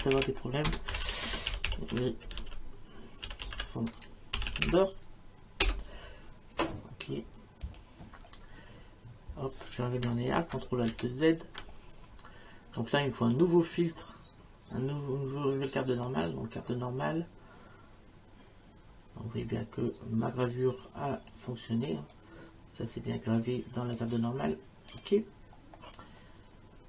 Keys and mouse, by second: 0.0-5.2 typing, 5.6 Return, 5.6 KP_Enter, 7.6 click, 10.9 ctrl+alt+z, 13.4 click, 16.0 click, 20.5 click, 22.1 click, 24.9 click.